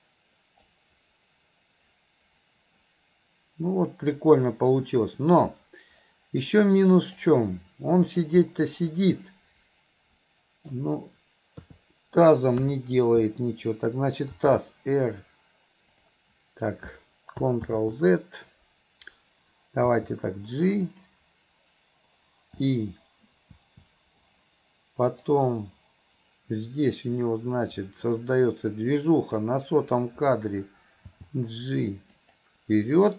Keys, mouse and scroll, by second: 0.7-7.3 drag, 8.1 click, 8.5-10.8 middle drag, 25.2 click, 27.0-29.4 drag.